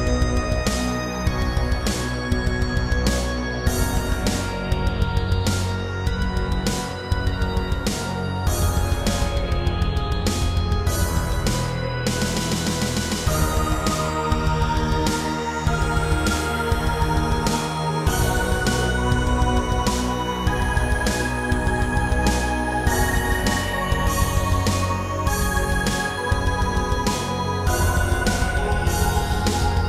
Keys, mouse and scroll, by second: 0.2 middle click, 2.3 shift+middle click, 3.2 scroll down 1, 4.8 Tab, 5.4 scroll up 1, 6.4-6.8 typing, 7.2 click, 8.8-9.5 typing, 10.4 Escape, 11.3 h, 12.5 ctrl+z, 12.7 g, 13.0 z, 13.6 z, 16.1 click, 16.5 a, 16.8 b, 17.2 click, 19.2 ., 20.7 click, 21.1 s, 21.4 z, 25.1 click, 26.1 scroll down 2, 26.5 Tab, 26.9 middle click, 29.0 7, 29.6 scroll up 2.